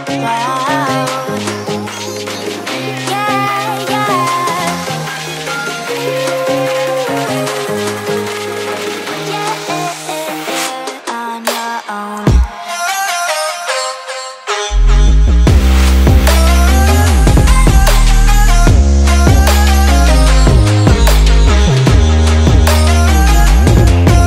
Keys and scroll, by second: 0.5 super+s, 1.3 super+s, 2.0 super+z, 2.6 super+s, 2.9 super+z, 3.9 super+z, 4.1 super+s, 4.4 super+z, 4.5 super+s, 4.9 super+z, 5.8 super+z, 8.7 super+s, 10.6 super+s, 11.1 super+z, 11.3 super+z, 12.3 super+s, 14.3 super+s, 15.0 super+z, 15.6 super+z, 16.8 super+z, 17.3 super+s, 17.9 super+s, 19.0 super+s, 20.0 super+z, 20.5 super+z, 20.6 super+z, 20.9 super+s, 21.4 super+s, 23.3 super+s.